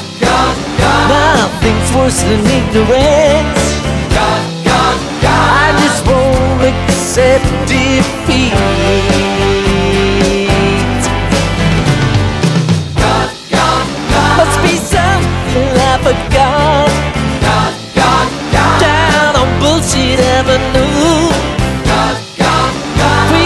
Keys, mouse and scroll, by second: 0.2-4.6 drag, 5.2 click, 8.8 click, 10.5 click, 15.0 click, 21.5 click.